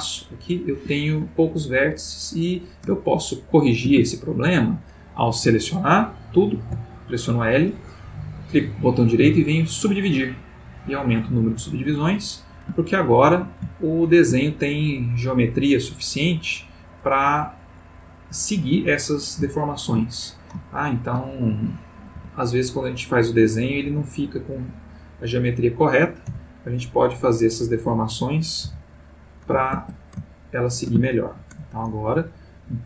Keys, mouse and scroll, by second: 0.7 Escape, 2.9-3.8 ctrl+middle drag, 4.0-4.8 ctrl+shift+middle drag, 6.6 l, 8.3 right click, 9.1 click, 10.9 click, 11.6 click, 12.8-13.6 ctrl+middle drag, 13.8-14.3 ctrl+shift+middle drag, 19.5-20.1 shift+middle drag, 20.6-21.4 ctrl+middle drag, 22.2 Tab, 23.0 click, 23.9 Tab, 24.4 click, 26.3 l, 27.5 click, 28.6 l, 29.8 ctrl+Tab, 30.3-31.1 ctrl+middle drag, 31.2 ctrl+shift+middle click, 32.2 click.